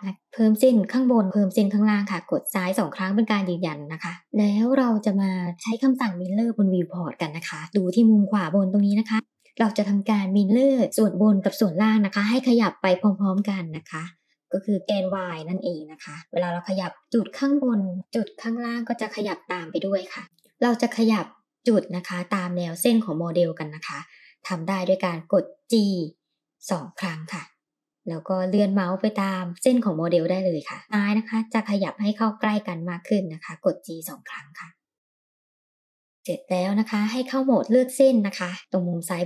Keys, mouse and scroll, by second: 0.4 ctrl+r, 2.7 click, 5.4 shift+click, 15.8 click, 16.1 g, 20.2 click, 27.9 g, 31.1 click, 33.1 g, 36.2 click, 38.9 click.